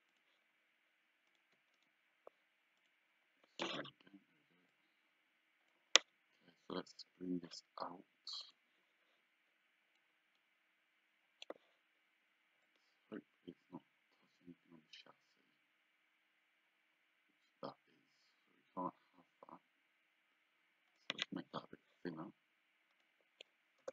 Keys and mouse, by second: 0.1 shift+click, 1.3 shift+click, 1.8 right click, 4.7 click, 8.4 click, 10.0 click, 12.7 click, 23.0 click, 23.8 KP_0.